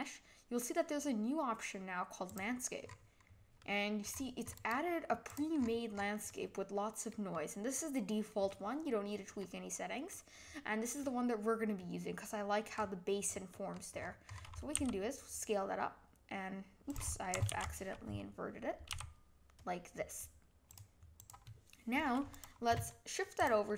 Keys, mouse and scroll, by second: 2.8-3.3 scroll down 8, 3.6-4.1 middle drag, 4.1-4.5 scroll up 1, 4.5-5.2 right drag, 5.2 click, 5.5-6.3 scroll up 6, 6.3-9.7 middle drag, 9.7-10.1 scroll down 1, 10.1-12.7 middle drag, 12.7-14.7 scroll down 20, 13.5 middle click, 14.7 s, 17.5 ctrl+z, 18.9 s, 21.1 click, 22.3 click, 22.9-23.4 middle drag, 23.4 click.